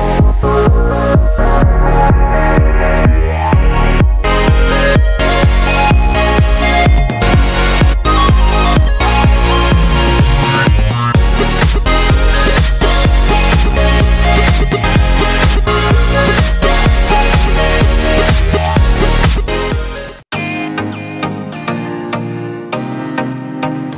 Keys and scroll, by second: 0.5 typing.